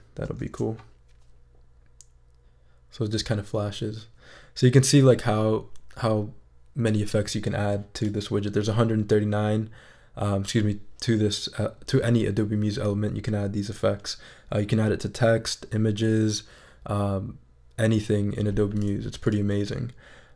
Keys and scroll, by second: 0.4 shift+super+e.